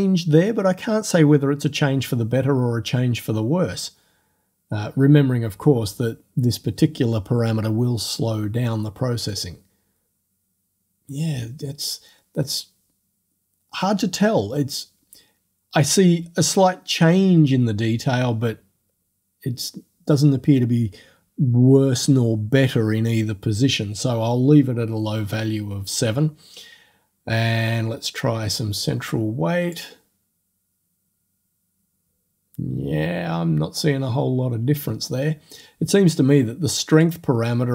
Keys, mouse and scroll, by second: 9.3 click, 13.1 click, 13.1 middle click, 28.2-29.9 drag, 32.2-34.4 drag, 37.0-37.7 drag.